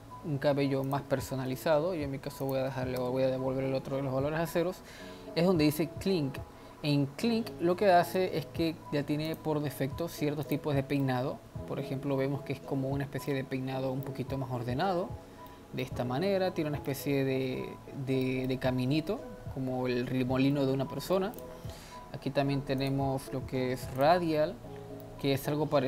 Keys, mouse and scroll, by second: 0.9-4.1 drag, 4.1 scroll down 3, 5.2-5.9 scroll down 1, 8.1-10.6 drag, 11.1-21.4 middle drag, 21.4 click, 22.9-25.1 drag, 25.1-25.8 middle drag.